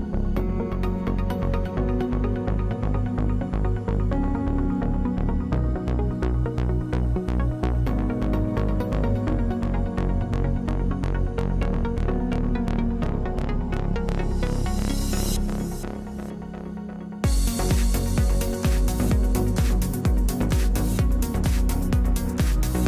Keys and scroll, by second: 10.0 0, 11.1 Return.